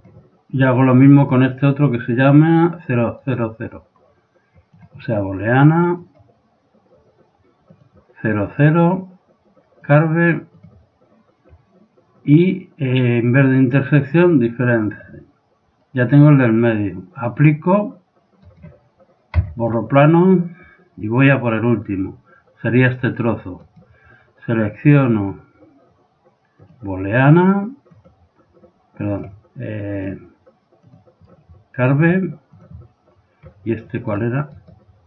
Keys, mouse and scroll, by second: 1.2 right click, 3.3 right click, 4.8-6.6 drag, 7.7-9.7 drag, 9.9-11.7 drag, 12.9-14.8 drag, 17.3-20.1 drag, 18.4 right click, 19.4 x, 20.1 right click, 21.2-23.1 drag, 23.7 right click, 25.1-26.9 drag, 27.9-29.7 drag, 30.0-31.9 drag, 32.0-33.8 drag, 34.1-35.0 right drag.